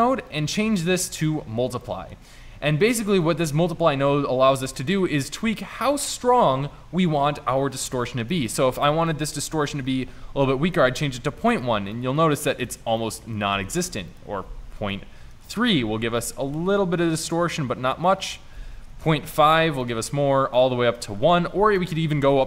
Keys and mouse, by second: 11.0 middle click, 11.2-12.4 middle drag, 13.4 middle click, 16.2 middle drag, 16.6 middle click, 16.8 middle click, 17.0 middle click, 19.9-22.4 middle drag.